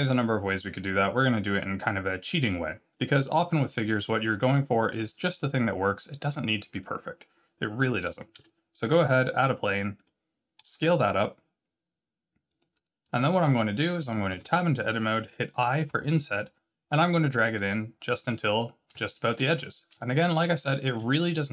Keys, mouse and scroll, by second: 8.3 shift+a, 9.3-9.7 scroll down 3, 9.7 middle click, 10.6 s, 13.1 middle click, 14.3 Tab, 15.8 i, 18.4-18.8 scroll up 6, 18.9 shift+middle click, 19.5-19.9 scroll up 2, 19.9 shift+middle click, 20.6 scroll up 1, 21.0 shift+middle click.